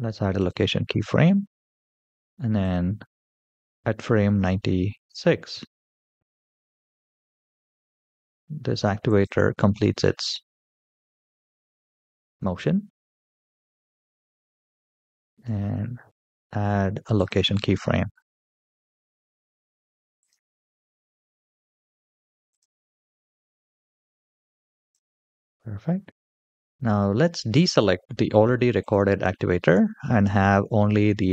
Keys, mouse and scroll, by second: 0.0 i, 2.4-5.0 drag, 5.8 g, 15.2 i, 20.0-23.0 right drag, 24.5 click, 28.6 click.